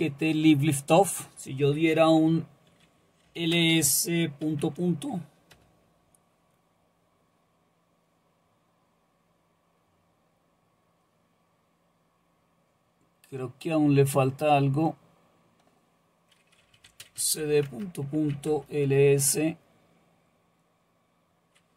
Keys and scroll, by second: 3.3-4.4 typing, 5.5 typing, 16.4-18.8 typing.